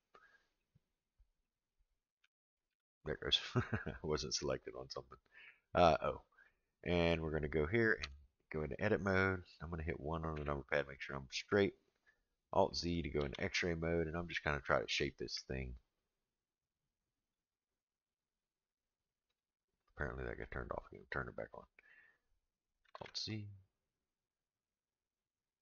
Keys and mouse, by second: 0.5 click, 1.4 click, 2.2 o, 2.7 o, 8.0 Tab, 10.3 KP_1, 13.2 alt+z, 17.2 click, 18.3 click, 19.3-20.0 drag, 20.4-21.0 drag, 22.9 alt+z.